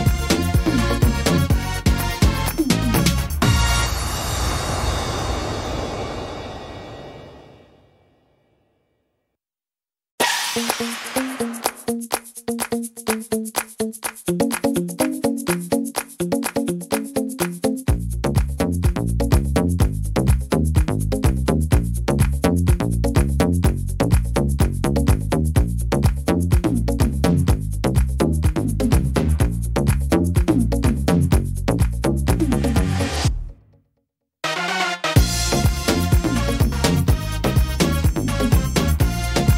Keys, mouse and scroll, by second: 7.5 click, 15.5 shift+right click, 17.3 click, 28.8 middle click, 29.3 middle click, 30.2 right click, 32.4 click, 34.0 right click, 35.0 click, 37.9 ctrl+z, 38.8 click.